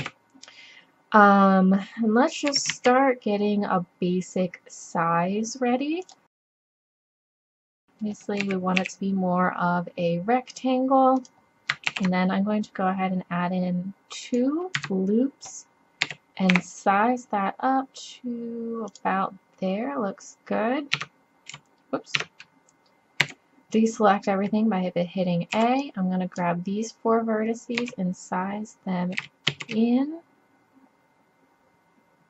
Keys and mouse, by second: 0.0 KP_5, 2.5 s, 5.7 click, 7.4 KP_7, 8.4 s, 11.9 ctrl+r, 15.3 ctrl+r, 16.1 s, 19.3 click, 21.0 Tab, 21.5 z, 22.2 Tab, 23.2 a, 25.5 b, 27.8 s.